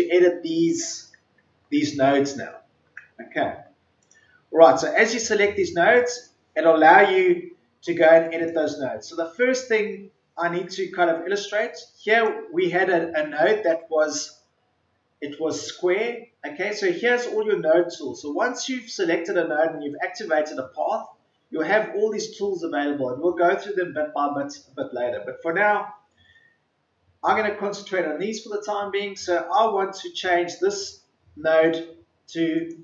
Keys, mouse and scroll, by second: 3.9 click, 7.1-7.5 scroll down 1, 8.2 click, 9.9-10.4 ctrl+scroll down 1, 10.7-11.1 ctrl+scroll up 1, 11.9-32.8 drag.